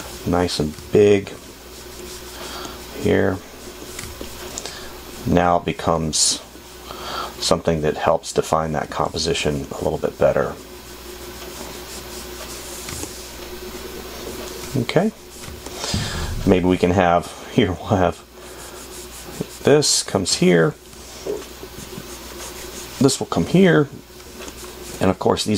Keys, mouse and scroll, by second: 4.4 space, 6.3 space, 9.2 space, 17.2 space, 24.0 space.